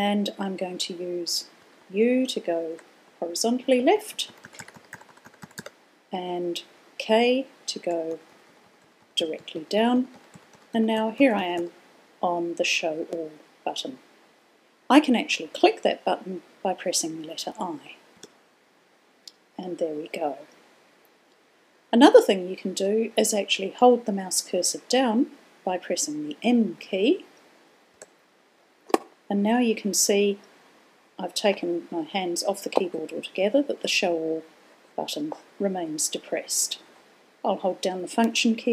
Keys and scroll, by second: 2.4-2.9 typing, 4.4-6.9 typing, 8.1-12.7 typing, 19.3 typing, 29.0 0.